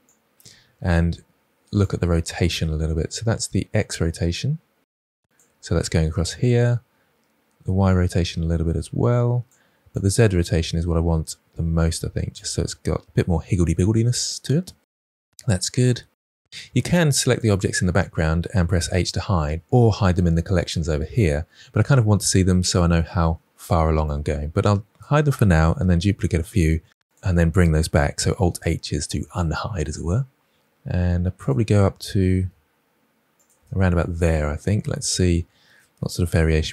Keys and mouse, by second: 2.7-5.3 drag, 7.2-9.5 drag, 9.8-11.6 drag, 14.7 KP_1, 16.5 ctrl+z, 18.8 h, 25.7 shift+d, 28.4 alt+h, 29.8 shift+middle drag, 32.3 Delete, 33.5 Delete, 36.5 shift+middle click.